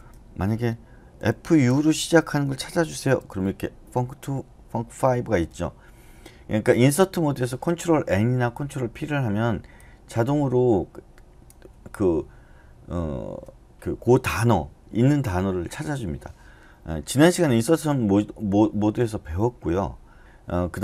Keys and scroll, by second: 1.1-1.7 typing, 2.9 ctrl+n, 20.2 Escape.